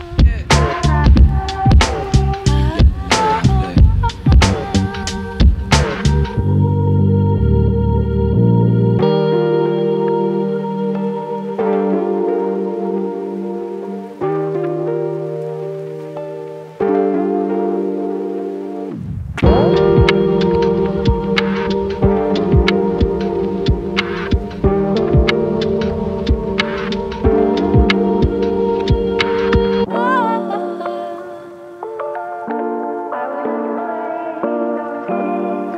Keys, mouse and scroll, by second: 0.8 e, 2.7 e, 5.0 e, 7.3 e, 11.7 scroll down 2, 16.3 scroll down 1, 19.4 scroll up 1, 19.6-22.6 shift+middle drag, 22.6 ctrl+a, 24.1 e, 28.6 scroll up 3, 28.9 shift+middle click, 29.5-30.2 scroll up 1, 30.2 click, 30.9 g, 32.8 click, 33.0 g, 34.7 click, 35.0 g.